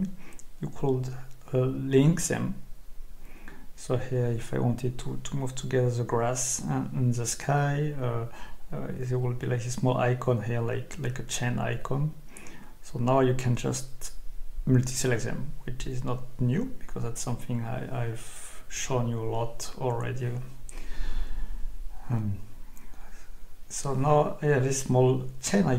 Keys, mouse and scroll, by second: 1.7 Escape, 3.4 click, 5.1 click, 7.4 Escape, 12.4 ctrl+click, 14.2-15.4 drag, 19.8 Escape, 24.7 click.